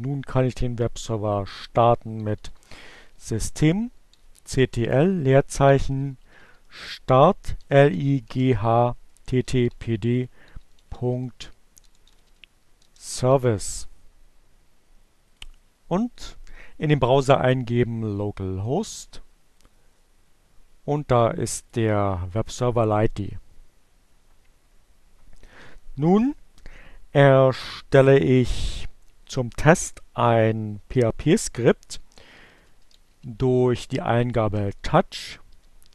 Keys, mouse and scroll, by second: 0.7-12.9 typing, 13.2 Return, 15.2 click, 18.6 right click, 19.4 click, 21.2 click, 31.2-32.9 typing, 34.0-35.9 typing.